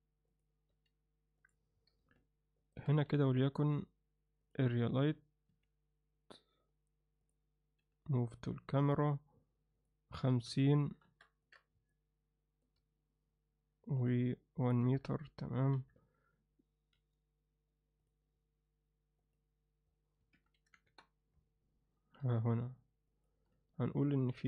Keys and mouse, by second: 0.7 g, 3.1 shift+a, 5.5 r, 7.8 m, 9.8-11.2 drag, 11.5 click, 14.8 KP_7, 16.9 g, 19.2-21.4 drag, 22.2 r.